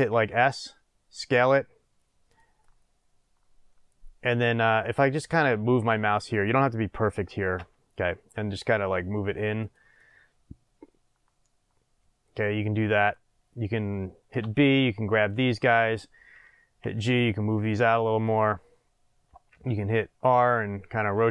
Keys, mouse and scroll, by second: 0.1 s, 2.3 click, 2.6-6.6 middle drag, 7.5 g, 9.7 click, 9.9-13.0 middle drag, 13.0 click, 14.4 b, 16.8 g, 18.3 click, 19.5 r.